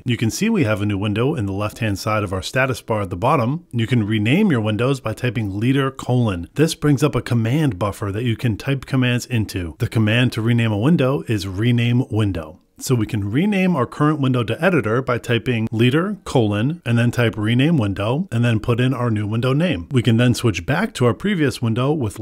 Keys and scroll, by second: 5.6 ctrl+b, 16.5 Return, 20.6 ctrl+b, 21.9 ctrl+b.